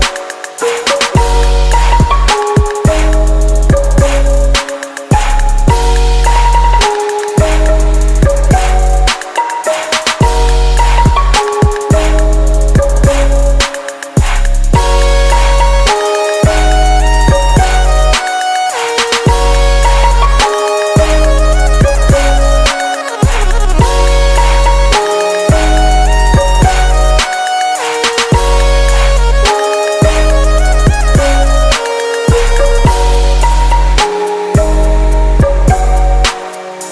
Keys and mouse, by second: 0.2-1.3 drag, 1.3 s, 3.3-4.8 middle drag, 4.0 s, 4.8-8.1 drag, 7.7 KP_0, 9.0 s, 10.0 g, 11.6 r, 12.6 r, 13.8 g, 16.3-17.5 right drag, 17.5 ctrl+p, 22.9-28.1 middle drag, 24.9 a, 28.4-30.1 drag, 32.6 KP_0, 35.1 ctrl+Down, 36.8 p.